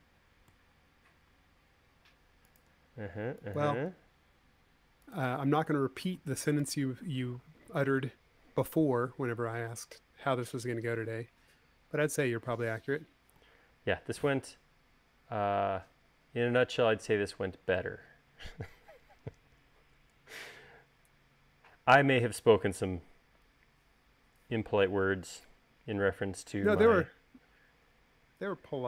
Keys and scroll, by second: 7.4 u.